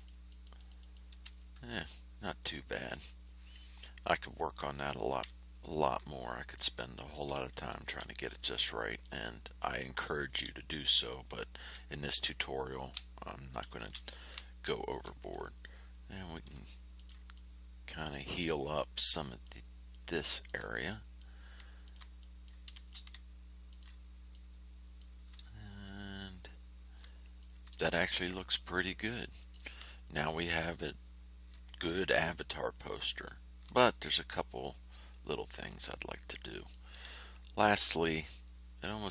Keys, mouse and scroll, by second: 1.3 ctrl+scroll down 2, 2.4 ctrl+click, 4.2 click, 5.5 ctrl+scroll up 2, 6.2 ctrl+click, 7.8 h, 9.0 click, 11.7 click, 13.7 shift+h, 14.8 ctrl+click, 15.6 click, 16.9 ctrl+click, 17.3 ctrl+click, 19.0 ctrl+click, 19.4 ctrl+click, 20.4 ctrl+click, 20.8 ctrl+click, 21.8 ctrl+click, 22.1 ctrl+click, 22.7 space, 23.6 ctrl+click, 24.3 click, 25.7-26.3 ctrl+scroll down 4, 27.0 ctrl+click, 28.6 ctrl+scroll down 2, 29.2 ctrl+click, 29.5 ctrl+middle click, 32.2-33.4 middle drag, 33.9 ctrl+scroll up 2, 34.8 ctrl+scroll down 2, 35.8-36.9 ctrl+middle drag, 37.2 ctrl+scroll up 2, 38.4 ctrl+scroll down 2.